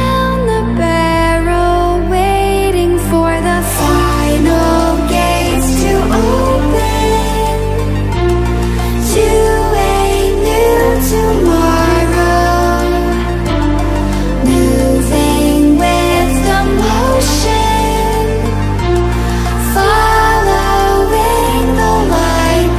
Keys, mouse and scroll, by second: 8.4 ctrl+alt+scroll down 1, 9.4 click, 10.5-11.5 ctrl+alt+scroll down 2, 11.5 ctrl+alt+scroll up 1, 11.8 ctrl+click, 12.9 ctrl+alt+scroll up 2, 13.9 click, 16.1-17.0 ctrl+alt+scroll up 3, 17.5-19.5 drag.